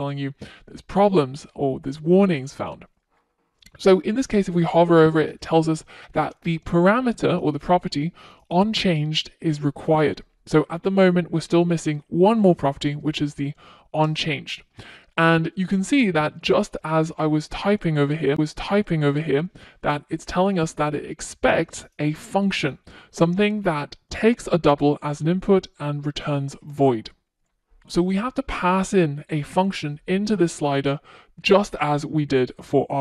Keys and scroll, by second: 15.8 Return, 29.0 Return.